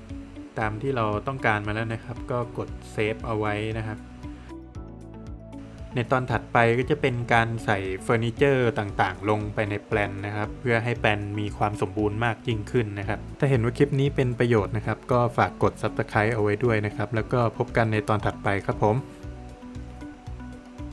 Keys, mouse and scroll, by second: 0.2 scroll down 1, 11.9 click.